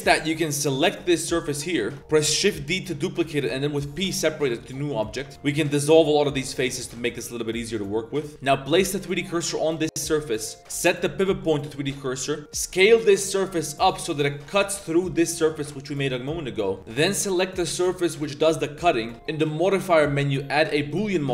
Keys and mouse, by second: 1.8 click, 2.0 3, 2.0 a, 2.0 l, 2.4 shift+d, 4.0 p, 5.3 a, 5.3 b, 5.3 x, 6.9 shift+click, 7.6 click, 7.8 z, 8.3 a, 8.3 3, 8.3 shift+s, 9.1 drag, 9.6 3, 9.7 click, 10.6-11.5 drag, 11.9 click, 12.1 z, 12.2 click, 12.4 Tab, 12.4 3, 12.4 s, 12.7 s, 14.3 click, 14.7 Tab, 14.9 click, 15.1 click, 15.3 g, 16.2-16.7 drag, 16.9 click, 17.2 g, 18.4 click, 20.0-20.9 drag.